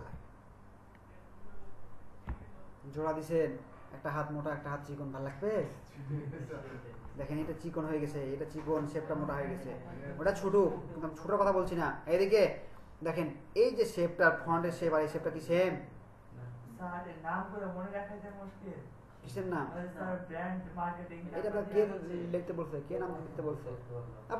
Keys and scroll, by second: 0.1 Right.